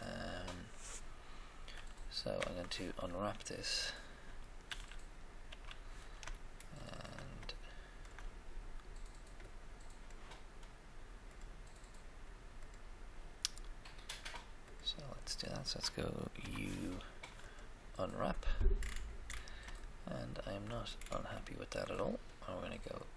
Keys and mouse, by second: 2.3 Tab, 2.4 Tab, 4.6 a, 5.4 a, 9.4 click, 14.6-16.5 drag, 16.3 u, 16.5 u, 23.0 click.